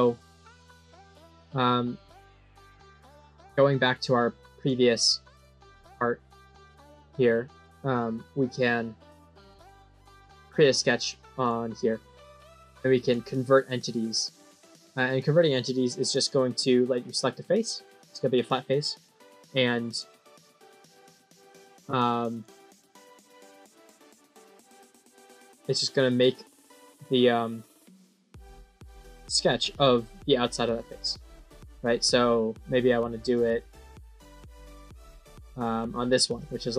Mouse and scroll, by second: 1.0 middle click, 3.3 middle click, 4.5 click, 5.2 click, 6.8-8.5 middle drag, 10.3 click, 11.3 click, 12.9 click, 19.8 click, 22.2 click, 22.8 click, 23.6 click, 24.1 click, 24.5 click, 31.4 middle click, 33.2 click, 35.5 click, 36.3 click.